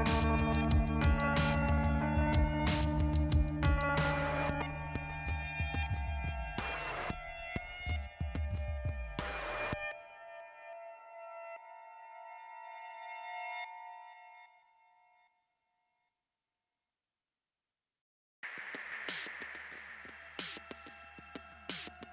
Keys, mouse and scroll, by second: 0.7 click, 1.9 click, 2.9 click, 4.2 click, 4.7 click, 7.4 click, 10.1 click, 10.3 click, 10.8-11.8 scroll down 1, 11.8 click, 16.2 click, 17.0 scroll up 2, 17.8 scroll down 2, 18.1 ,, 18.7 click, 19.4 click, 20.4 click, 21.9-22.1 scroll up 2.